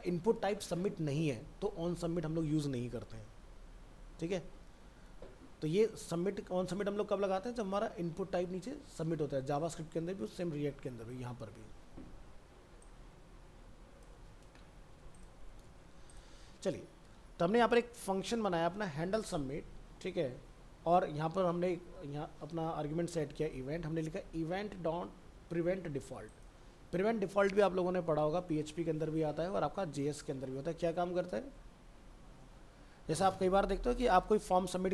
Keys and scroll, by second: 14.2 ctrl+c, 14.7 alt+Tab, 15.3 ctrl+a, 15.6 ctrl+v.